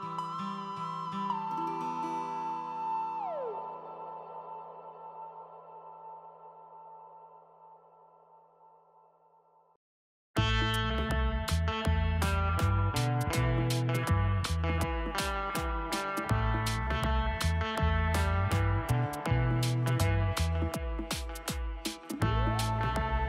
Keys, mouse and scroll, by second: 1.4 scroll down 1, 7.4-7.7 typing, 10.0-10.9 typing, 10.5 Tab, 12.4 scroll down 1, 13.0 typing, 13.3 F2, 20.1-20.8 typing, 20.8 alt+0, 22.2-23.2 typing.